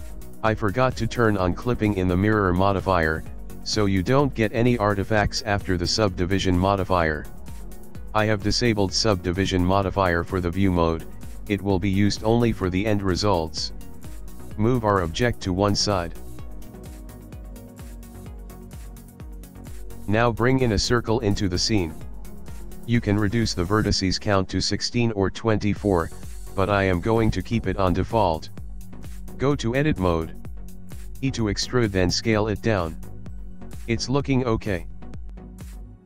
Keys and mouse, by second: 3.1 click, 3.6 click, 5.3 click, 7.8 click, 8.3 click, 10.3 ctrl+middle click, 11.1 shift+middle click, 11.6 ctrl+middle click, 12.1 middle click, 13.4 g, 17.4 middle click, 17.9 middle click, 18.6 click, 19.9 shift+a, 24.9 ctrl+middle click, 25.9 shift+middle click, 27.7 click, 28.2 click, 28.6 Tab, 31.1 e, 35.7 ctrl+middle click.